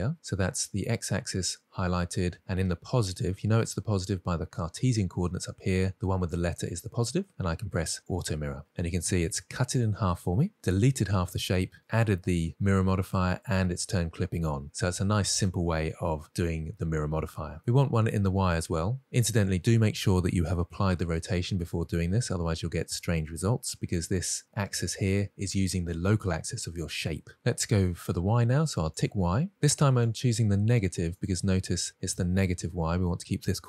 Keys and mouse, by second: 8.4 click, 9.5-10.2 middle drag, 15.3 middle click, 17.8 middle click, 29.3 click, 30.4-31.5 drag.